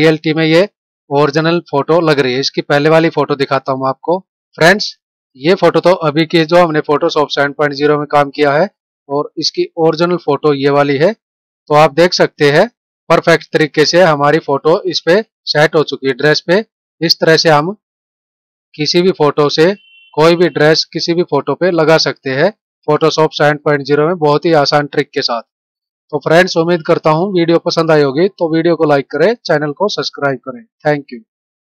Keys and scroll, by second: 4.4 F9.